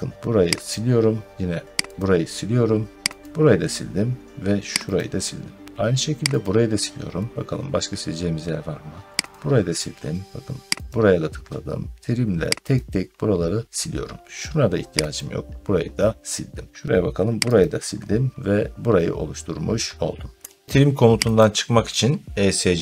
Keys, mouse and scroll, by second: 0.6 click, 1.9 click, 3.1 click, 4.8 click, 6.3 click, 9.2 click, 10.8 click, 12.6 click, 15.0 click, 17.5 click, 18.5 middle click, 18.7 middle click, 20.6 scroll, 20.6 click, 21.2 click.